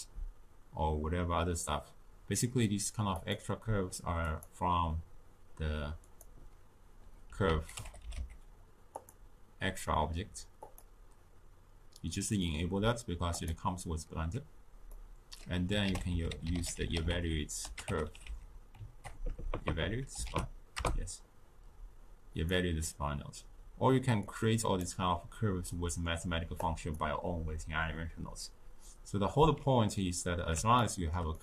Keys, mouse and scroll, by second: 3.2-6.2 drag, 14.9 middle click, 15.8 ctrl+a, 19.3 BackSpace, 19.4 BackSpace, 19.7 BackSpace, 24.3-25.7 drag, 25.7-26.6 middle drag, 26.6-29.6 drag, 30.8-31.4 shift+middle drag.